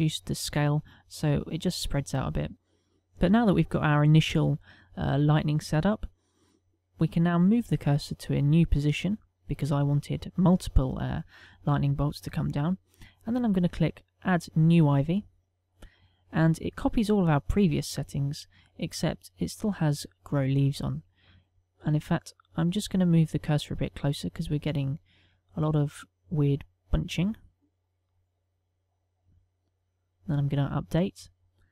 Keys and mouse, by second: 10.4 right click, 16.0 click, 21.1 click, 29.5 right click.